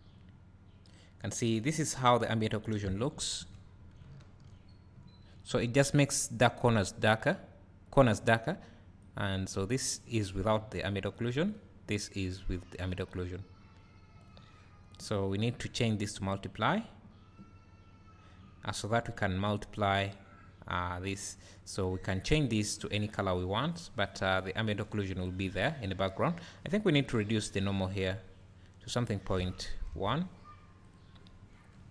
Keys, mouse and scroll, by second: 1.9 scroll up 2, 3.2 KP_Decimal, 4.1 `, 4.6 scroll up 1, 4.9 `, 5.7 scroll up 1, 9.5-22.4 drag, 24.4 scroll down 1, 26.7 click, 30.8 click, 31.6 scroll up 1.